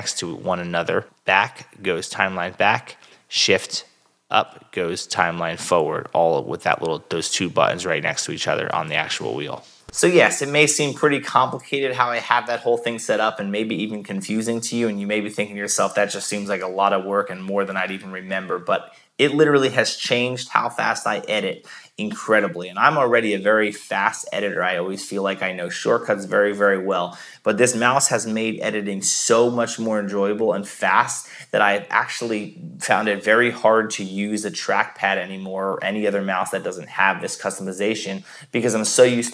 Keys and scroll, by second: 1.0 shift+BackSpace, 3.9 shift+Return.